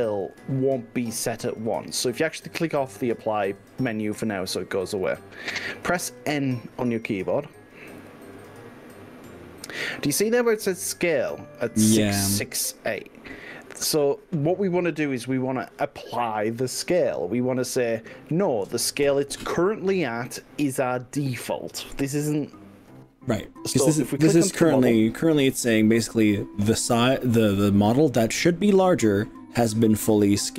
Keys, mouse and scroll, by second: 4.5 click, 8.0 n.